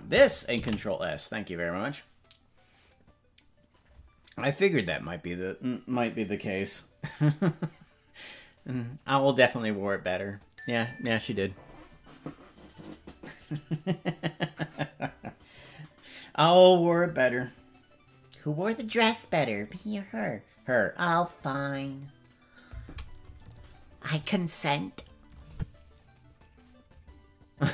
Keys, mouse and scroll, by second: 2.9 ctrl+s, 25.4 click.